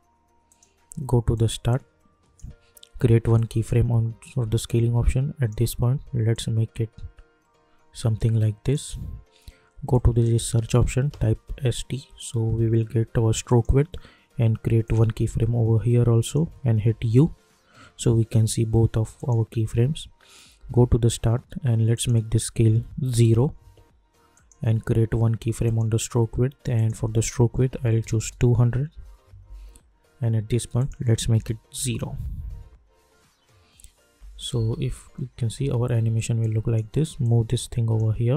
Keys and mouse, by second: 10.7-11.9 typing, 13.4 click, 16.9 u, 19.1 click, 20.5 j, 21.9 click, 23.3 Return, 24.3 click, 28.9 Return, 29.4 k, 30.7 click, 31.7 Return, 34.1 j, 34.5 space, 36.4-38.3 drag.